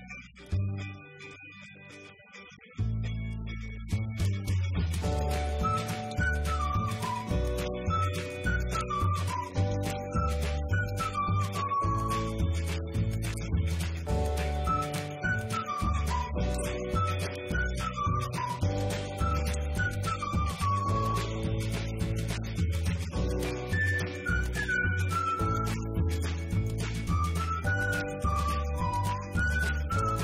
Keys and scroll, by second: 0.8-1.7 typing, 2.6 ctrl+b.